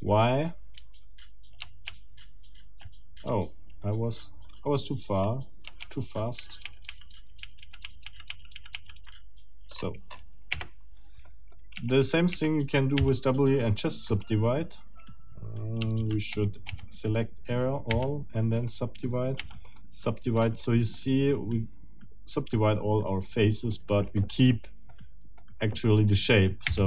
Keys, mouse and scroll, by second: 0.8 Tab, 1.9 ctrl+z, 4.3-4.7 scroll down 2, 5.2 scroll up 2, 6.3 ctrl+shift+z, 9.8-10.4 ctrl+shift+scroll up 4, 10.6 ctrl+shift+Tab, 11.3 ctrl+shift+middle click, 11.6 ctrl+shift+click, 11.8 ctrl+shift+Tab, 13.0 ctrl+shift+w, 14.1 click, 16.0 ctrl+z, 16.3 ctrl+a, 17.9 w, 18.6 click, 19.4 w, 19.7 middle click, 20.4-20.8 scroll up 2, 21.0-23.9 middle drag, 24.9 middle click, 26.6 w.